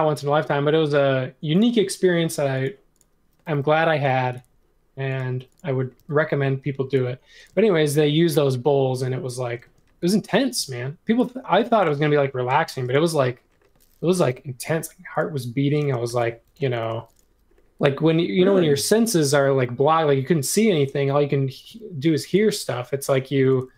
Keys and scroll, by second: 5.9 m, 7.5 space, 9.6 space, 10.5 m, 11.8 space, 12.5 space, 14.2 m, 15.8-16.6 typing, 21.6 m.